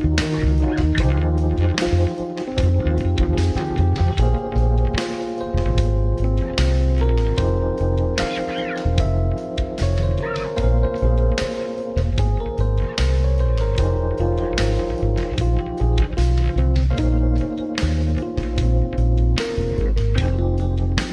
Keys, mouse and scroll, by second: 8.9-12.0 middle drag, 13.5 click, 15.1-21.1 drag.